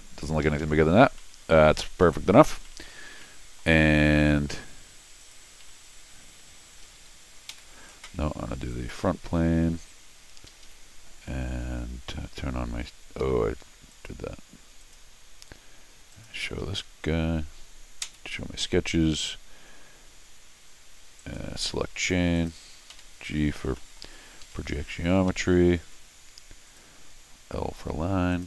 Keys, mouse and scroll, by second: 0.4 Escape, 0.6 Escape, 0.7-1.1 scroll down 4, 1.2 middle click, 1.9 scroll down 2, 2.0 middle click, 2.6 middle click, 3.1 scroll up 1, 3.2 middle click, 5.2 click, 5.6 c, 6.8 Escape, 7.0 Escape, 7.5 r, 8.7 click, 9.4 c, 10.5 Escape, 10.6 Escape, 13.3 Escape, 13.9 click, 14.8 click, 16.1 click, 16.6 Escape, 16.7 Escape, 18.6 Escape, 21.2 right click, 22.3 click, 22.9 g, 23.7 scroll up 2, 23.8 middle click, 24.4 Escape, 25.8 l, 26.7 click, 28.3 click.